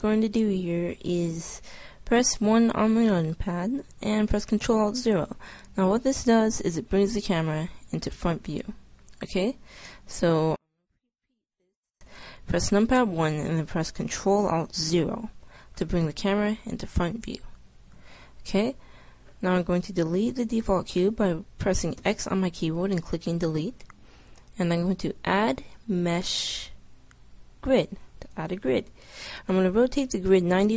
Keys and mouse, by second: 2.5 KP_1, 4.6 ctrl+alt+KP_0, 22.1 x, 25.0-26.7 drag.